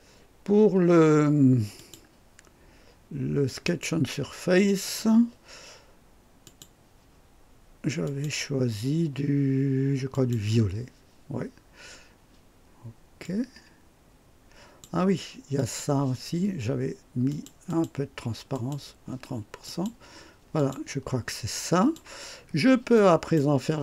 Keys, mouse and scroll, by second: 1.8 click, 3.6 click, 6.4 click, 8.0 click, 10.1 click, 13.2-15.0 drag, 15.6 click, 17.3 click, 18.5 click, 19.6 click, 20.6 click, 21.3-22.2 drag, 22.4 scroll up 1, 22.9-23.5 right drag.